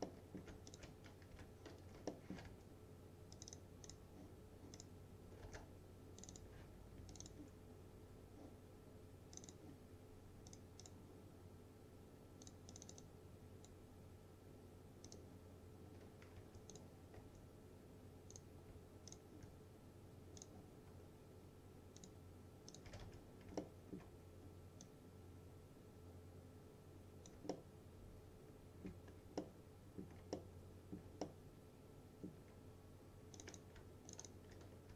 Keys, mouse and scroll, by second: 0.1-0.7 alt+middle click, 0.7 ctrl+click, 1.4 Delete, 1.9 space, 2.2 alt+middle click, 2.5 2, 3.4 click, 5.5 space, 6.3 click, 7.2-15.1 ctrl+drag, 13.4-14.0 click, 15.8 scroll up 1, 16.4 2, 16.8 click, 17.2 2, 18.4 click, 19.2 shift+click, 22.7-23.6 typing, 23.7-24.3 alt+middle click, 24.3-24.9 scroll down 1, 24.9-27.4 drag, 27.6-29.1 alt+middle drag, 29.1 scroll down 1, 29.5-30.1 alt+middle drag, 31.3-32.5 alt+middle drag, 33.4 click, 34.2 ctrl+click, 34.7-34.9 typing.